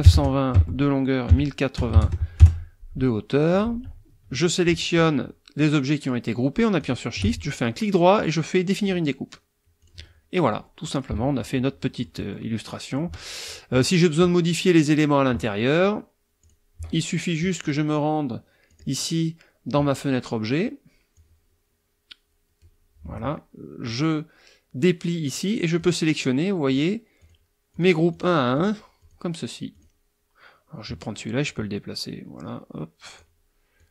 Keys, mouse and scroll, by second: 0.0-0.1 typing, 0.5 Tab, 1.3 KP_1, 1.8 KP_0, 1.9 KP_8, 2.0 KP_0, 2.4 KP_Enter, 3.3 click, 6.8 shift+click, 7.4 shift+right click, 8.8 click, 9.8 click, 11.1 KP_Subtract, 11.8 click, 12.6 click, 13.4 click, 16.4 click, 17.6 click, 18.7 click, 21.1-22.8 drag, 23.9 click, 25.8 click, 26.7 click, 27.2 click, 27.7 click, 28.1 click, 28.5 click, 29.0 click, 29.7 click, 31.4-33.4 drag, 33.8 click.